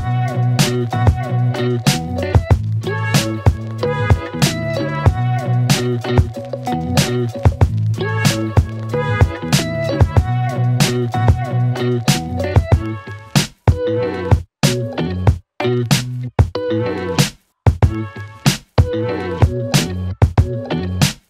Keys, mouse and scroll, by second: 1.5 click, 5.2 click, 7.2 click, 10.0 click, 12.8 Return, 13.6 click, 15.6 Return, 17.3 click, 20.1 Return.